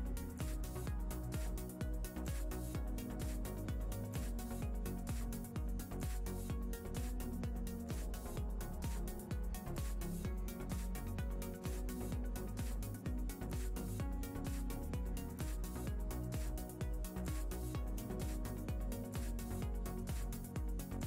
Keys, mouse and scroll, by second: 2.2 click, 2.8 shift+a, 8.0 click, 11.9 click, 13.2 ctrl+middle click, 14.7 click, 15.5 click, 19.3 click.